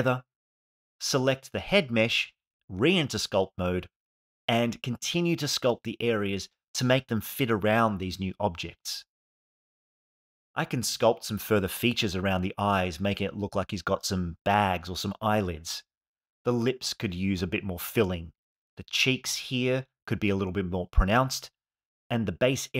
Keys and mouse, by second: 0.1 shift+click, 0.4 shift+click, 0.9 ctrl+j, 1.7 click, 2.3 ctrl+Tab, 3.2 middle click, 3.6 click, 5.2 click, 6.2 alt+middle click, 8.3 click, 8.6 click, 10.2 f, 11.8 click, 12.0 click, 13.5 shift+f, 13.6 click, 15.3 click, 17.0 click, 17.3 click, 17.5 click, 17.6 click, 18.1 alt+middle click, 18.3 click, 18.9 alt+middle click, 19.4 click, 19.9 click, 20.5 alt+space, 21.1 alt+shift+middle click, 21.6 ctrl+alt+middle click, 22.1 alt+middle click.